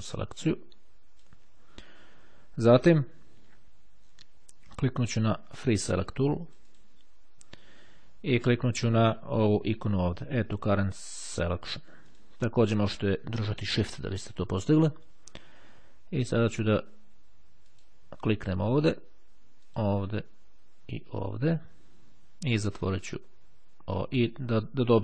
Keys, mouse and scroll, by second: 5.7-7.4 drag, 8.0 click, 10.6-12.6 drag, 17.5 click, 19.5 click, 21.6 click, 23.0 click.